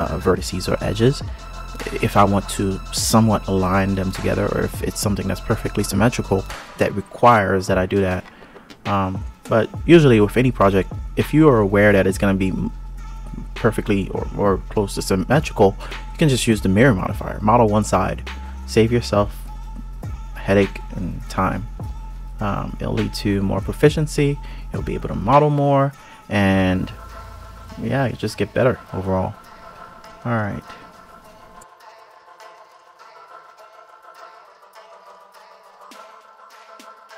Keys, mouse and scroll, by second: 1.5 click, 4.2 click, 5.0 KP_3, 5.7 ctrl+KP_3, 7.8 click, 9.1 shift+click, 10.6 g, 12.6 KP_1, 13.1 KP_3, 13.7 ctrl+KP_3, 15.2 g, 19.1 click, 19.4 g, 21.6 click, 23.5 click, 24.6 click, 25.3 click, 26.6 click, 27.4 click, 31.4 click, 31.9 click, 32.6 click, 33.0 click, 33.6 click, 33.7 click, 33.9 click, 34.5 click, 35.4 scroll down 3, 35.5 click, 36.0 ctrl+KP_3, 36.2 g, 36.4 click, 36.5 click, 36.6 KP_3, 36.7 g.